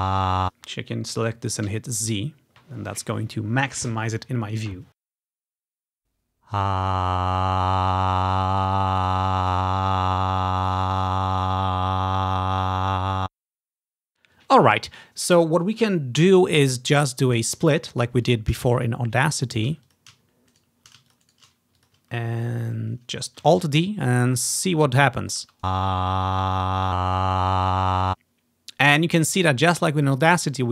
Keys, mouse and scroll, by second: 0.4 space, 1.8 z, 5.9 space, 13.1 space, 17.4 click, 18.3 click, 18.6 s, 19.4 click, 19.8 s, 20.0-21.2 shift+drag, 20.6-21.7 shift+right drag, 21.2 shift+click, 21.4 shift+click, 21.9 click, 22.2-22.7 ctrl+scroll down 1, 22.7-23.1 ctrl+scroll up 1, 23.5 alt+d, 24.1-25.7 drag, 25.5 space, 28.0 space, 30.5-30.7 ctrl+scroll up 1.